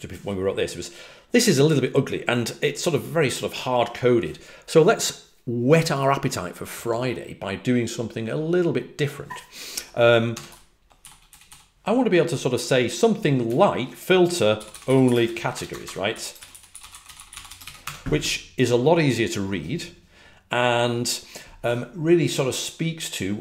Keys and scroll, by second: 10.0-11.9 typing, 14.5-17.8 typing.